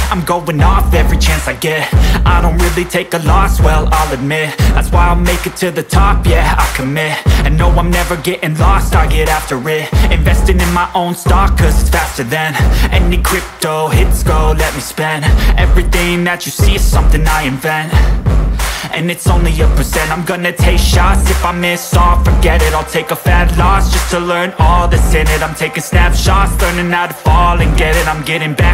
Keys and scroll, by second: 1.5 ctrl+space, 4.6 ctrl+space, 6.3 ctrl+space, 8.2 ctrl+space, 13.7 ctrl+space, 18.3 ctrl+alt+space, 21.3-21.6 typing, 27.4 [, 28.3 space.